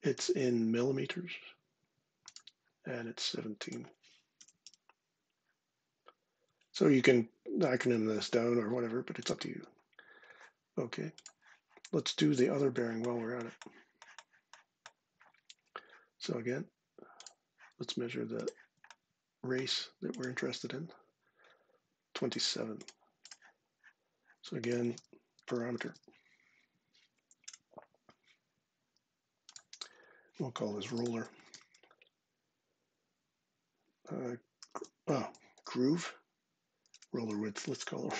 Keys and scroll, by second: 3.9-4.9 typing, 24.5-26.2 typing, 27.0 Down, 27.2 Return, 30.4-31.9 typing, 34.4 shift+g, 36.7-38.1 typing.